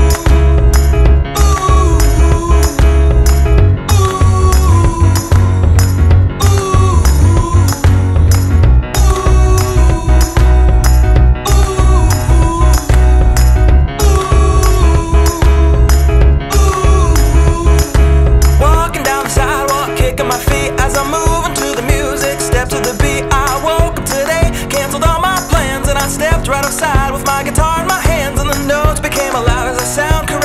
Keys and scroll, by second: 9.5 alt+2, 10.0 alt+super+a, 10.5 super+a, 26.3 alt+e, 26.5 alt+2, 27.0 alt+e, 27.3 alt+2, 27.8 ctrl+alt+2.